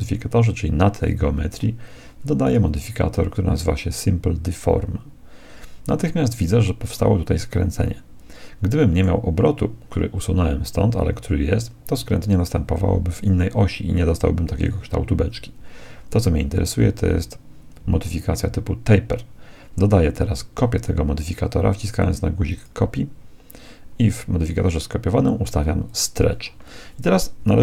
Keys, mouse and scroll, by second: 2.4-4.2 drag, 6.9-8.7 middle drag, 16.5-18.4 drag, 22.5-24.4 drag, 25.8-27.6 drag, 27.4 KP_1.